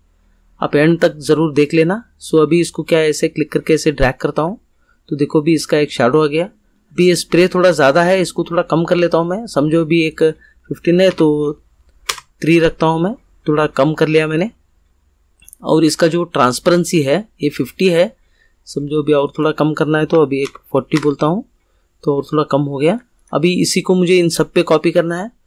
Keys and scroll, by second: 11.1 3, 12.0 Return, 20.1 4, 20.4 0, 20.9 Return.